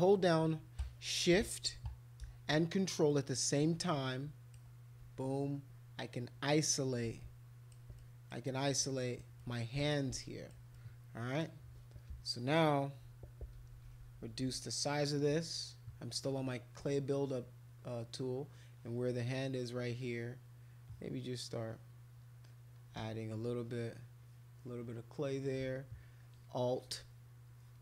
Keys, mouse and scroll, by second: 3.1-4.5 ctrl+shift+drag, 7.1 alt+click, 8.0 alt+click, 8.7 alt+click, 9.4 alt+click, 10.2 alt+click, 10.7 click, 13.6-14.5 typing, 16.2 click, 18.7 click, 19.3 click, 20.0 click, 20.8 click, 21.4 click, 21.6 click, 22.4 click, 23.6 click, 23.9 click, 24.2 click, 24.6 click, 26.0 alt+click, 26.7 alt+click, 27.5 alt+click.